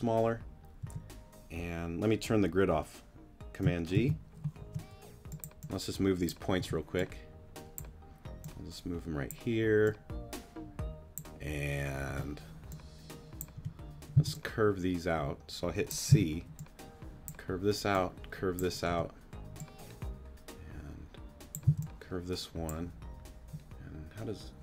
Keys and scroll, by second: 0.8 t, 3.9 super+g, 4.6 super+y, 5.1 y, 6.6 y, 12.1 y, 13.5 y, 14.1 v, 16.1 c, 18.9 t, 21.6 c.